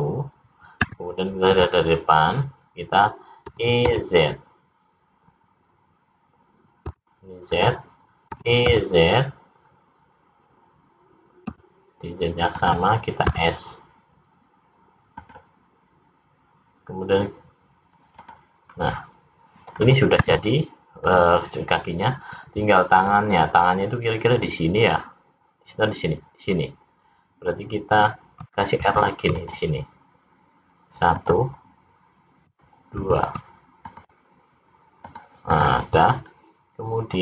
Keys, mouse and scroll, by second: 3.6 e, 8.4 e, 13.3 s, 18.2 click, 18.7 middle click, 20.2 `, 23.1-23.6 scroll up 2, 28.8 ctrl+r, 33.0 ctrl+r, 35.6 click, 36.3 scroll up 1.